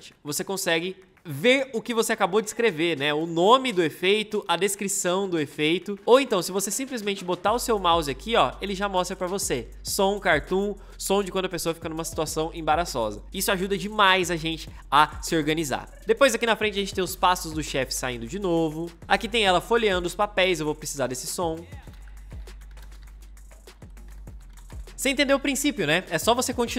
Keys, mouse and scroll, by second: 6.1 ctrl+z, 16.0 ctrl+z, 16.7 m, 21.6-25.0 typing.